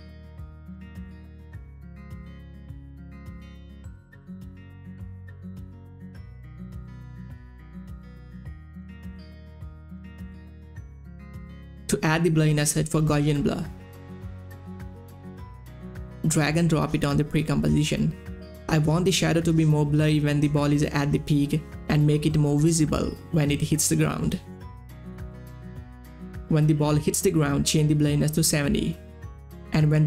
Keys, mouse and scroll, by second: 0.1 shift+Up, 0.4 shift+Down, 0.9 Up, 1.9 Right, 2.1 Down, 2.2 Right, 2.3 Up, 2.5 Down, 3.2 click, 3.6 space, 9.6 space, 9.8-13.1 drag, 13.1 Down, 13.5-15.2 typing, 16.4-23.4 drag, 24.9 u, 26.8 click, 28.7 7, 29.9 Return.